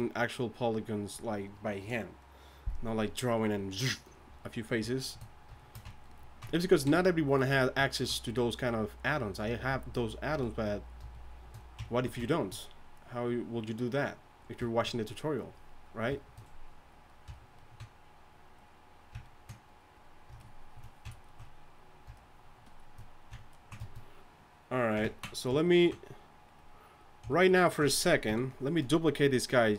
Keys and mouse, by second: 5.6 middle drag, 6.8 KP_1, 26.2-27.3 drag, 28.3 KP_3.